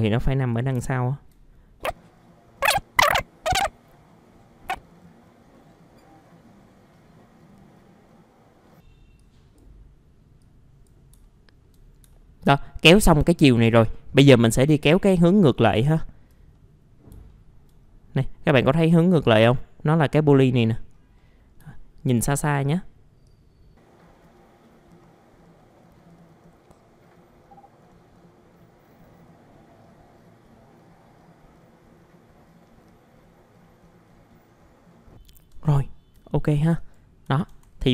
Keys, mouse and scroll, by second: 0.0 click, 0.8 alt+middle click, 1.8 click, 2.4 click, 2.6 alt+middle click, 2.8 click, 3.0 alt+middle click, 3.3 right click, 3.3 click, 3.4 right click, 3.6 click, 3.7-4.1 scroll up 2, 3.8 middle click, 4.1 click, 4.3-4.6 scroll down 1, 4.6 click, 4.7 alt+middle click, 5.0 alt+middle click, 5.2 ctrl+alt+middle click, 5.4 click, 5.7 alt+middle click, 5.9 click, 6.1 scroll down 1, 6.5 click, 7.2 click, 7.4 alt+middle click, 7.6 click, 7.9 click, 8.3 click, 9.2 click, 11.2 alt+middle click, 12.1 alt+middle click, 13.0 alt+middle click, 14.2 middle click, 15.0 alt+middle click, 15.6 scroll up 1, 15.9 alt+middle click, 16.5 scroll down 1, 16.5 middle click, 17.3 alt+middle click, 17.8-20.0 scroll up 1, 20.3-21.2 scroll down 1, 21.2 middle click, 21.7 alt+middle click, 23.2 click, 23.8 scroll down 1, 23.9 scroll up 1, 24.3 ctrl+alt+middle click, 24.5 click, 24.9 alt+middle click, 25.2 click, 25.4 alt+middle click, 25.6 click, 25.8-26.1 scroll down 2, 25.8 alt+middle click, 26.6 click, 27.3 click, 27.4 alt+middle click, 27.7 click, 28.0 click, 28.3 click, 28.7 click, 28.8 scroll down 1, 29.4 click, 30.0 alt+middle click, 30.0 click, 30.2 alt+middle click, 30.4 click, 30.8 alt+middle click, 31.0 click, 31.7 click, 32.3 click, 32.5 alt+middle click, 32.7 click, 33.0 click, 33.2 alt+middle click, 33.3 click, 33.5 alt+middle click, 34.1 alt+middle click, 34.4 click, 34.7 alt+middle click, 35.0 scroll down 1, 35.8 scroll down 1, 36.2 alt+middle click, 36.8 right click, 37.2 typing.